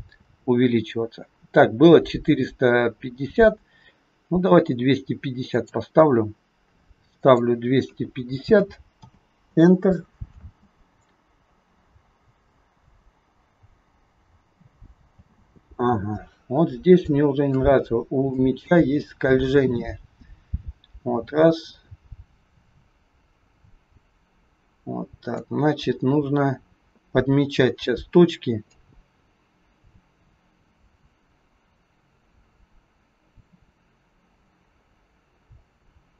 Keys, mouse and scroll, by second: 7.1 click, 10.4 space, 11.0 scroll down 3, 12.6 scroll down 2, 15.1 space, 16.4 scroll up 1, 17.0 shift+middle click, 17.0 shift+scroll up 1, 18.4 click, 28.8 click.